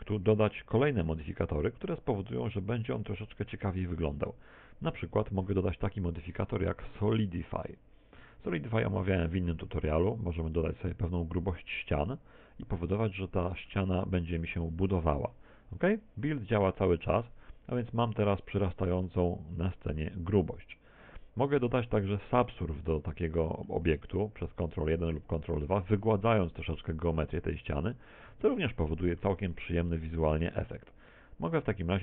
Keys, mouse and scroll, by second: 0.9 click, 11.9 click, 14.1 middle click, 14.9-15.7 scroll up 6, 15.6 middle click, 17.0 click, 20.8 middle click, 25.1 ctrl+1, 25.8 ctrl+2, 26.6 middle click, 28.5 middle click, 29.7 middle click, 31.1 click.